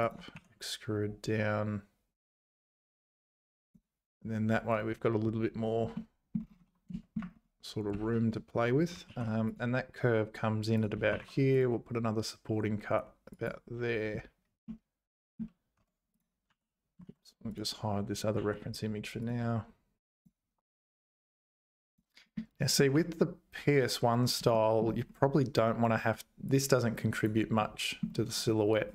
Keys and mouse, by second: 0.4 e, 6.1 click, 7.1 shift+click, 9.1 ctrl+r, 11.1 ctrl+r, 14.8 middle click, 15.8 Tab, 16.5 h, 17.1 ctrl+z, 17.5 click, 18.4 h, 20.7 Tab, 21.3 1, 21.9 click, 22.3 middle click, 22.9 `, 24.5 shift+middle click, 26.6 click, 27.6 middle click.